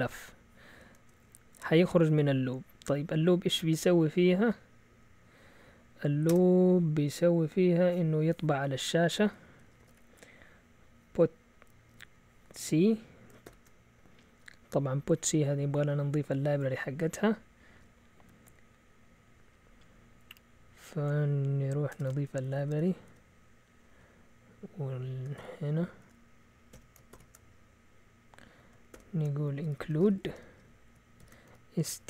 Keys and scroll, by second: 0.9 shift+Tab, 9.2-10.4 typing, 11.9 typing, 13.5 typing, 21.9 Escape, 22.3 ctrl+w, 22.4 ctrl+w, 22.5 ctrl+w, 25.4 shift+o, 26.7 Escape, 27.1 typing, 28.9-32.0 typing.